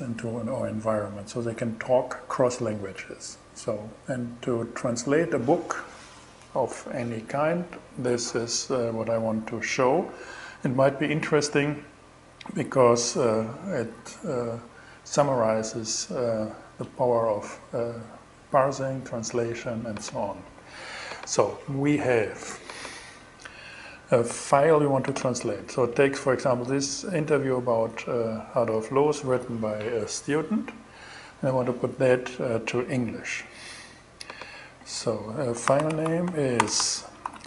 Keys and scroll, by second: 34.9-37.4 typing.